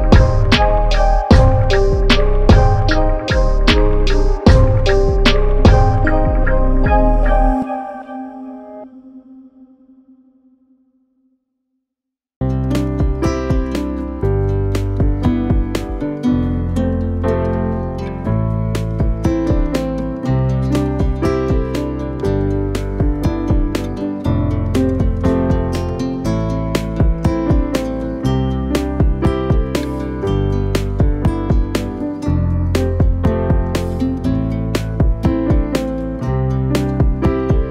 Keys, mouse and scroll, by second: 0.2 click, 0.5-1.2 scroll down 3, 1.2-1.9 scroll up 1, 1.9-3.9 scroll down 3, 4.0 click, 4.7 shift+d, 6.3-7.4 middle drag, 7.4 click, 7.7-8.2 scroll up 1, 8.2 r, 9.3 s, 11.8 click, 12.0-13.5 scroll down 1, 13.5 click, 14.0 Delete, 14.5 click, 15.0 shift+s, 16.1 shift+d, 17.7 r, 18.5 s, 20.0 r, 21.3 g, 22.9 s, 24.0 g, 25.5 s, 26.3 g, 28.3 click, 28.7-29.3 scroll up 4, 29.3-30.9 middle drag, 31.1 click, 31.3-31.8 scroll down 1, 31.8 s, 33.0 s, 33.7 scroll down 1, 33.9 middle click, 34.2-34.8 scroll up 2, 34.8 click, 35.1-35.8 scroll down 6, 35.8-37.7 drag.